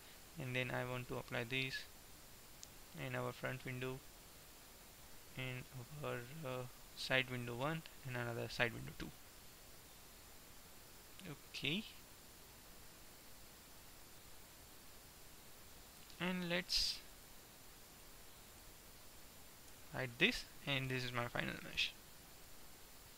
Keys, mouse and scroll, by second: 7.1-10.5 drag, 10.5 middle click, 13.3-16.0 middle drag, 17.3-19.8 right drag, 20.0 h, 20.3-22.3 middle drag.